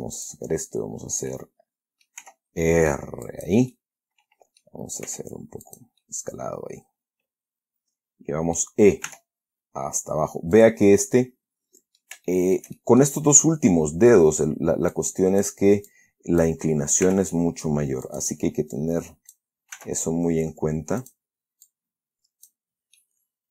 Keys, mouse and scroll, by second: 0.5 click, 1.6 middle click, 2.5 r, 3.6 click, 4.0-5.1 middle drag, 5.4 s, 6.0 click, 6.3-9.1 middle drag, 9.4 e, 10.9 click, 11.2-12.5 middle drag, 12.6 shift+middle click, 13.7 shift+middle click, 15.2 click, 16.2 click, 17.4 r, 18.4 click, 19.1 click, 20.1 s, 21.3 click, 22.0-23.0 drag, 23.3-23.5 middle drag.